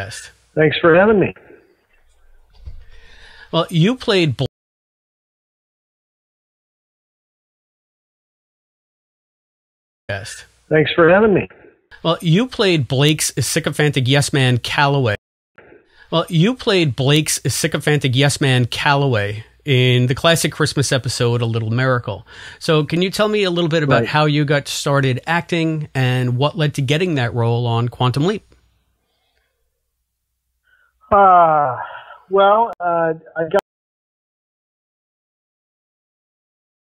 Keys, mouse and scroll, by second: 1.0 click, 1.5 click, 3.2-4.4 drag, 4.4 space, 5.1 Delete, 5.8 click, 6.9-8.3 drag, 9.3 click, 10.0 click, 10.0 space, 12.5 click, 13.2 click, 14.4 click, 15.0 space, 15.4 click, 15.5 space, 17.0 ctrl+s, 25.4-27.3 drag, 28.1 click, 30.7-32.5 drag, 32.6 Delete, 33.1 click, 33.5 space, 34.1-35.9 drag.